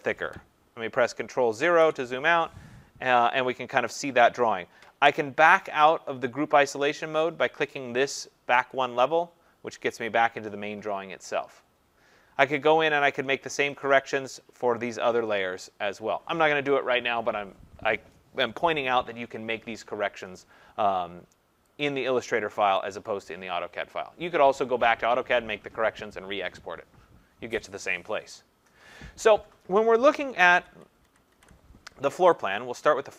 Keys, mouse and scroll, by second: 1.7 ctrl+0, 8.7 click, 13.6 click, 13.9 click, 21.8 click, 22.9 click, 30.1 click, 30.7 ctrl+=, 31.0 ctrl+=, 31.4 ctrl+=, 32.0-32.3 scroll, 32.6 scroll.